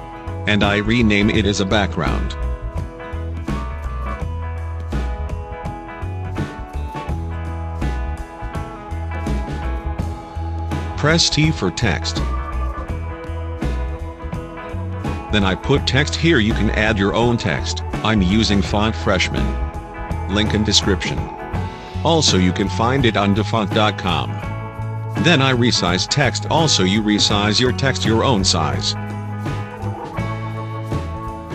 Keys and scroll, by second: 1.8 shift+b, 4.3 BackSpace, 6.0 shift+b, 6.5 a, 7.7-11.1 typing, 13.7 t, 16.9-18.4 typing, 24.9 ctrl+t.